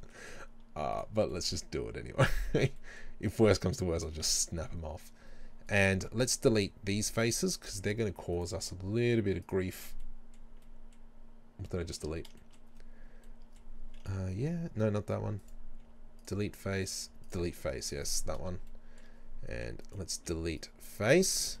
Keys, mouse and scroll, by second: 0.0-5.7 middle drag, 0.3 z, 1.9-2.3 scroll up 2, 5.7 right click, 6.4 Delete, 8.4 right click, 8.7 Delete, 10.1-15.4 middle drag, 12.0 ctrl+z, 12.8-13.3 scroll up 2, 14.4 Delete, 15.4 right click, 15.8 Delete, 16.8 right click, 17.1 Delete, 17.6 scroll down 1, 18.1-19.8 middle drag, 19.9 right click, 20.2 Delete, 21.1-21.6 scroll up 2.